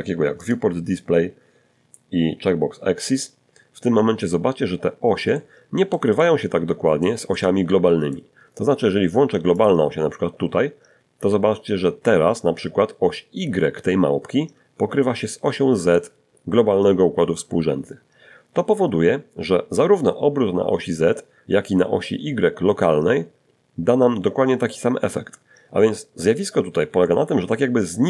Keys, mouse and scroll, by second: 1.3 click, 3.5 middle click, 4.5 middle click, 5.5-6.5 middle drag, 7.8 click, 10.4 scroll up 1, 25.2-26.8 middle drag, 27.0 middle click.